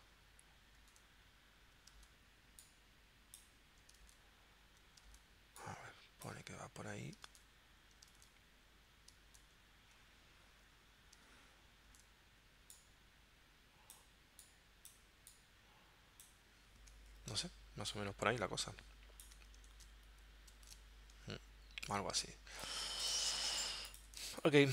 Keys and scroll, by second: 0.7 super+Tab, 2.0 super+Tab, 4.1 super+Tab, 5.2 super+Tab, 7.4 super+Tab, 8.2 super+Tab, 9.3 super+Tab, 11.9 super+Tab, 19.9 super+Tab, 20.7 super+Tab, 23.6 z, 24.2 space.